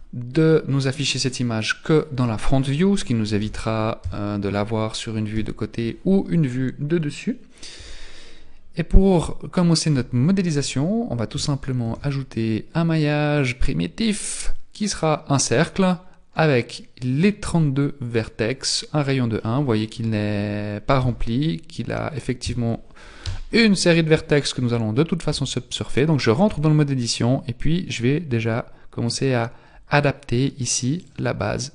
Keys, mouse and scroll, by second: 1.9 click, 3.4 KP_1, 4.0 KP_3, 5.3 KP_1, 11.9 shift+a, 19.4 middle click, 21.0 Tab, 22.4 Tab, 23.2 KP_1, 24.3-25.3 scroll up 4, 25.3 Tab, 26.5 s.